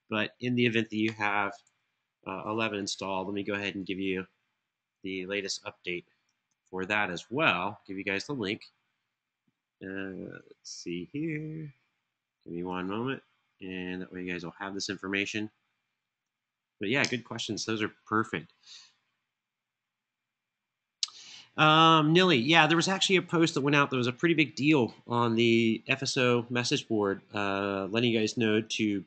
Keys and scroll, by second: 1.3 super+Tab, 6.1 super+c, 8.1 super+v, 12.4 super+c, 15.9 super+v, 16.7 Return.